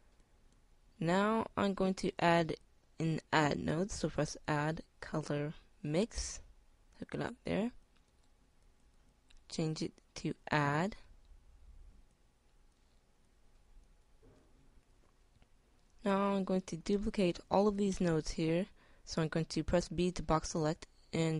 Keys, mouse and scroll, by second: 8.6-13.2 drag, 13.6-14.7 drag.